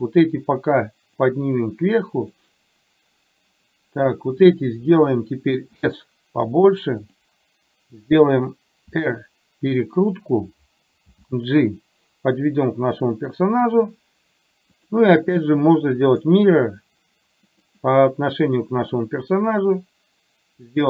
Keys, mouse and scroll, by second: 1.2-2.3 drag, 4.4 click, 5.9 s, 8.9 r, 11.2 g, 14.8-16.4 drag, 17.6 click, 20.7-20.8 drag.